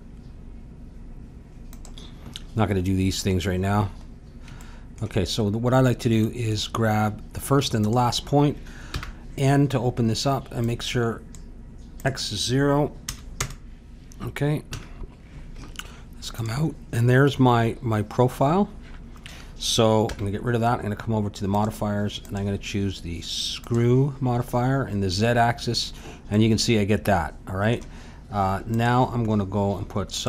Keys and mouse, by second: 3.5-7.8 middle drag, 7.8-9.7 drag, 8.9 n, 10.6-13.8 drag, 14.7 a, 15.5 Tab, 17.7 middle click, 20.0 n, 21.5-25.1 drag, 26.3-28.7 middle drag, 28.7-30.2 drag.